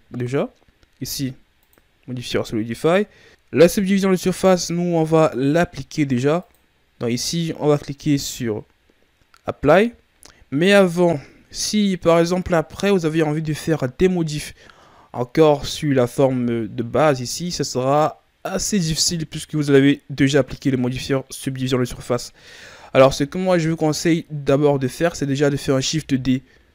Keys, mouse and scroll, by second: 3.5-6.3 middle drag, 6.3 click, 11.1-14.1 middle drag, 16.2 Tab, 22.9 ctrl+z, 23.3 ctrl+z, 25.8 shift+d.